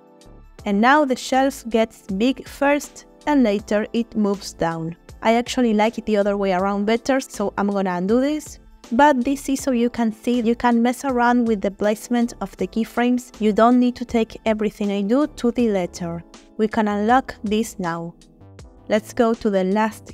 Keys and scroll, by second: 1.7 space, 4.9 space, 5.6 ctrl+space, 6.0 ctrl+z, 7.0 ctrl+z.